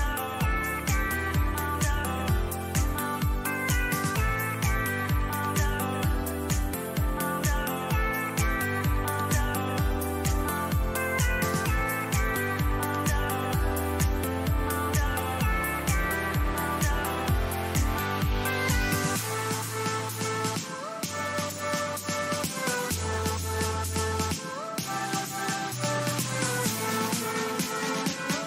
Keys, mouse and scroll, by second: 1.7 middle click, 2.9 a, 3.3 a, 5.8-8.6 drag, 7.4 middle click, 8.6-12.3 middle drag, 13.9-19.5 middle drag, 23.0-25.6 middle drag, 26.3-28.4 middle drag.